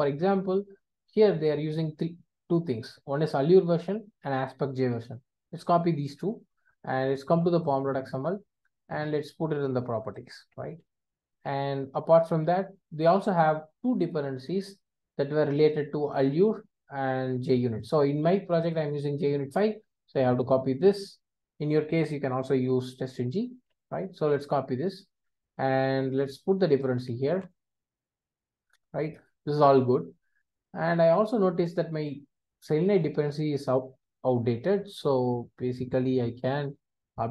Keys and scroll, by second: 36.8 ctrl+space.